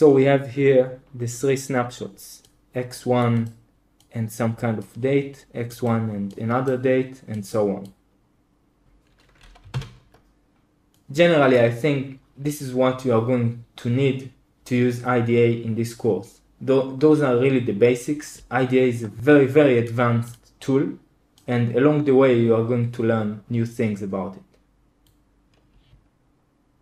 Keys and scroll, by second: 9.6 super+l.